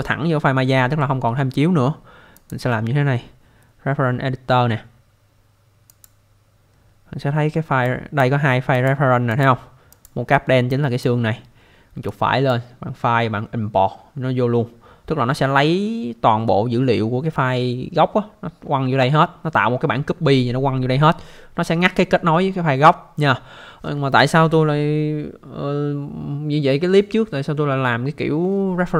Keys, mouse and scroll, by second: 2.4 click, 5.9 click, 7.8 click, 8.7 click, 9.3 click, 9.4 double click, 9.9 click, 10.7 click, 12.1 right click.